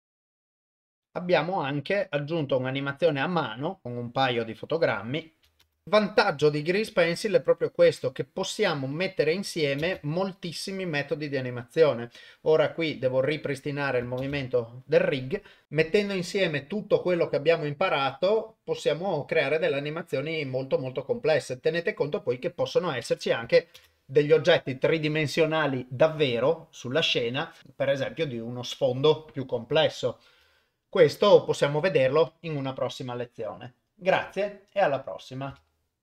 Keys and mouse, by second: 0.0-1.0 typing, 0.3 click, 0.9 click, 3.8 click, 5.6 shift+space, 7.9-9.7 ctrl+middle drag, 9.8 shift+space, 10.4 click, 12.3 click, 14.2 shift+space, 23.8 shift+space.